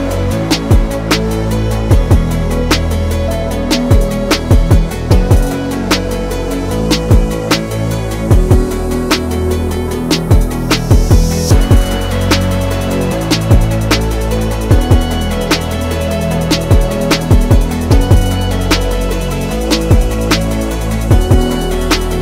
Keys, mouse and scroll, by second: 4.5-7.4 drag, 7.5-12.1 drag, 12.1 right click, 13.3-22.2 drag.